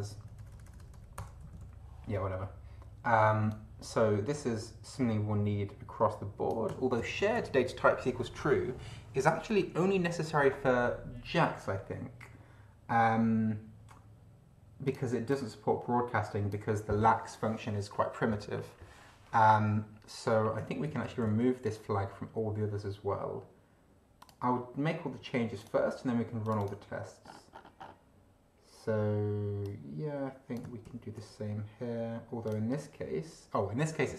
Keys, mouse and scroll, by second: 1.5 space, 1.6 End, 3.5-6.7 drag, 7.0 ctrl+c, 14.9 click, 15.3-16.7 drag, 20.9 ctrl+c, 24.1 click, 25.5 click, 26.4 click, 27.3-27.7 scroll up 1, 29.6-30.7 drag, 30.8 ctrl+v, 32.4 click.